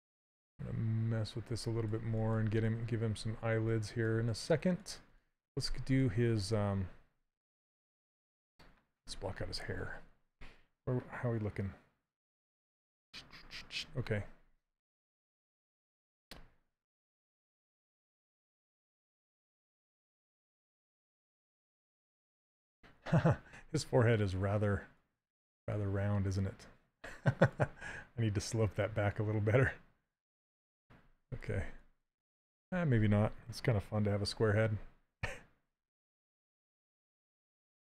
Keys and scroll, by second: 2.2 s.